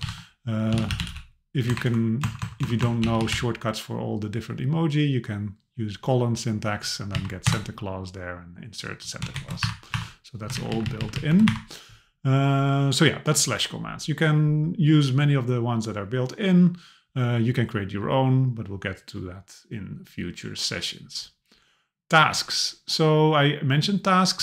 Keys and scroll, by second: 1.7 BackSpace, 7.1 Down, 7.5 Return, 9.4 shift+Left, 9.6 Delete, 10.1 Delete, 10.6 shift+Down, 11.5 BackSpace.